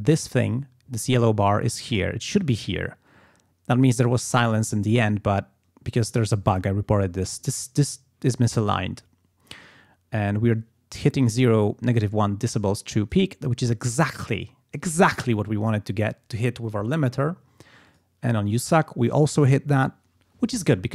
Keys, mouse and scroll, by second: 17.9 click.